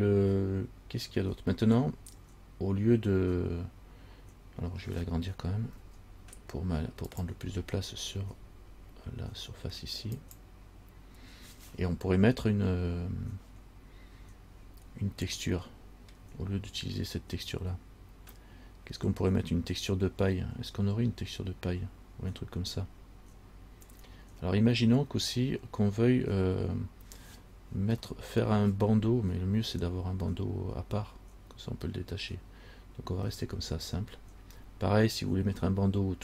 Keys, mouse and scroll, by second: 0.3-0.8 scroll up 3, 1.4-2.2 scroll down 3, 6.0 s, 8.4 g, 15.8 middle click, 28.3 shift+middle click, 33.5 shift+middle click, 35.1-36.2 scroll up 1.